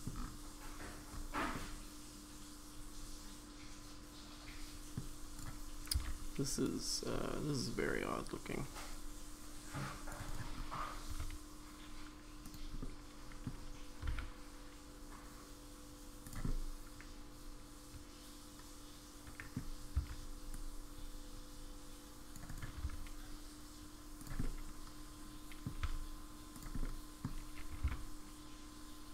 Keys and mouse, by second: 1.5-5.0 middle drag, 11.1 s, 12.8 middle click, 14.0 s, 16.5-19.5 middle drag, 19.9 c, 22.8 s, 24.4-25.6 middle drag, 26.8 middle click, 26.8 s, 27.7 g.